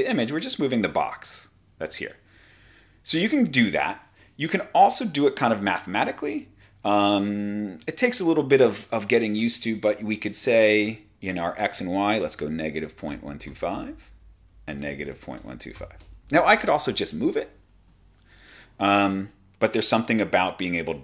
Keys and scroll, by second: 2.1 super+z, 12.1-16.2 typing, 17.9-19.2 typing.